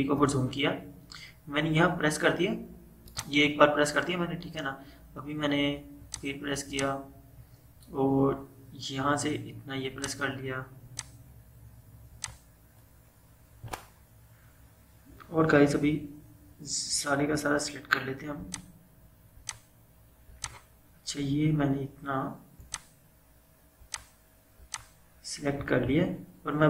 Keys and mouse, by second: 3.1 click, 6.1 click, 10.0 click, 18.5 click.